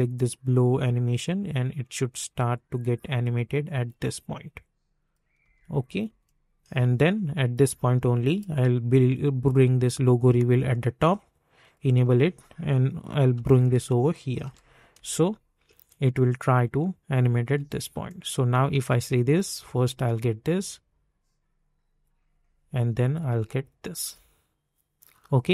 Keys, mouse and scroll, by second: 5.4 space, 6.9-11.6 drag, 13.3-14.9 typing, 17.4 space, 18.0 click, 18.7 space.